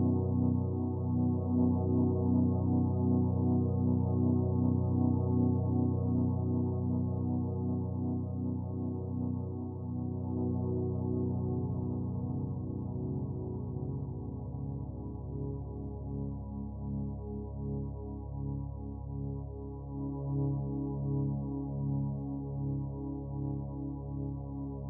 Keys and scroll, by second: 0.0 ctrl+z, 6.5 ctrl+z.